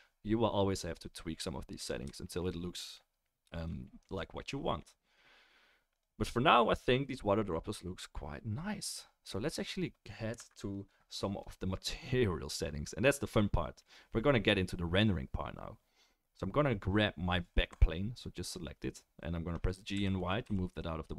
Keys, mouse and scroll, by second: 11.4 middle click, 11.5-19.3 right drag, 19.9 g.